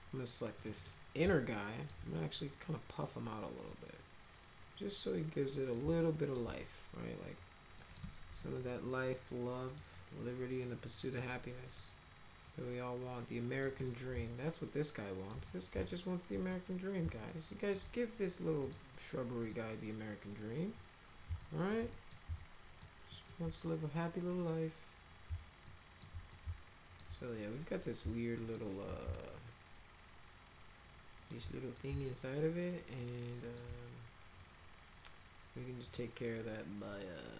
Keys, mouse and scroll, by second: 0.6 click, 0.8 click, 1.5 alt+middle click, 3.7-5.7 drag, 6.0 alt+middle click, 7.8 middle click, 8.3 1, 9.7 click, 10.6 click, 11.6 click, 12.4-13.6 drag, 13.8 middle click, 14.3-15.3 alt+middle drag, 15.5 middle click, 15.9 alt+middle click, 16.5 middle click, 17.3-17.7 alt+middle drag, 18.6 click, 19.4 click, 21.4 alt+middle click, 21.9 middle click, 22.3 alt+middle click, 23.1 alt+middle click, 25.7 alt+middle click, 26.3 alt+middle click, 28.1 alt+middle click, 29.1-31.3 alt+middle drag, 31.4 middle click, 32.0-33.6 alt+middle drag, 35.8 click, 36.9 click.